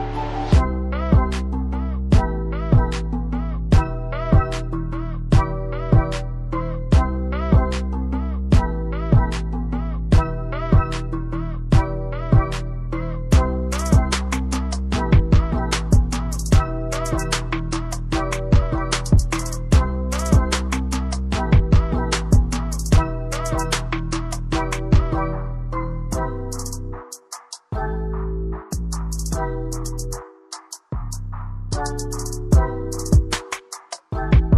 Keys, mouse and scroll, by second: 8.3 click, 11.5 right click, 12.5 click, 14.7 double click, 16.2 click, 27.0 click, 32.1 click.